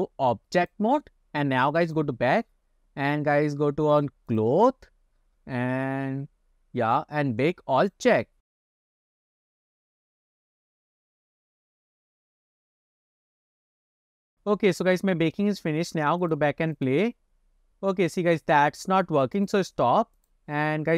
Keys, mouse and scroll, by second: 0.0-1.0 drag, 1.9 click, 4.0 click, 4.4 click, 5.3-7.4 scroll down 10, 7.9-14.5 drag, 14.9 click, 19.4 click, 20.2 click.